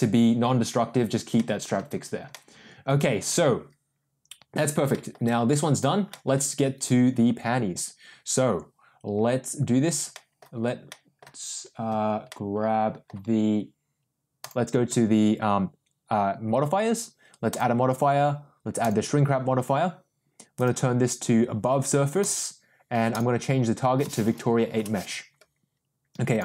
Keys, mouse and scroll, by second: 1.3-1.7 middle drag, 2.3-3.3 middle drag, 4.9 shift+middle drag, 6.0 middle click, 10.1 middle drag, 10.8 middle click, 12.2-13.0 middle drag, 14.4 click, 17.4-19.1 drag, 20.6-22.5 drag, 23.1-25.3 drag, 26.3-26.4 drag.